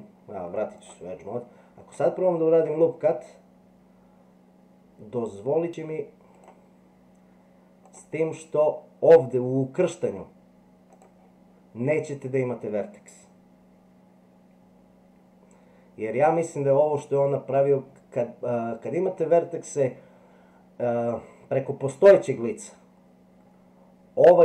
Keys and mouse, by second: 0.8 click, 2.4 ctrl+r.